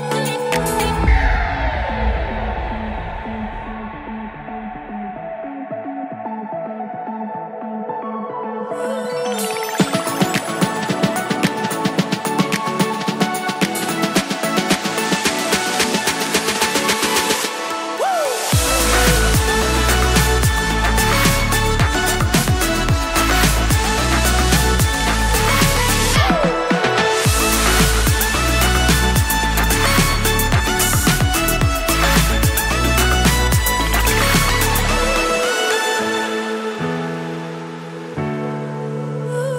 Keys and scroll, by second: 14.0 super+s, 25.3 shift+super+Left, 25.9 super+x, 27.0 super+v, 27.5 super+s, 30.7 super+Right, 33.4 super+s, 38.4 super+s.